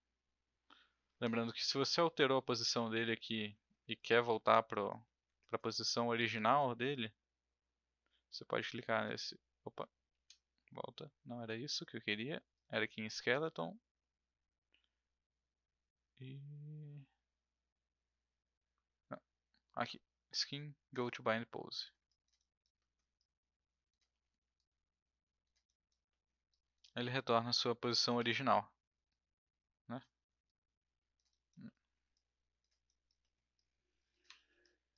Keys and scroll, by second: 9.9 ctrl+z, 24.1 w, 28.1 e, 34.3 ctrl+z.